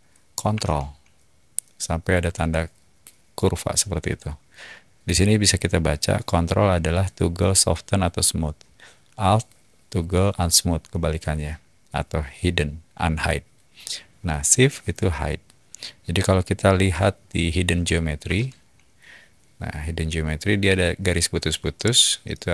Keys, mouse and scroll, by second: 18.2 h, 21.7-22.5 middle drag.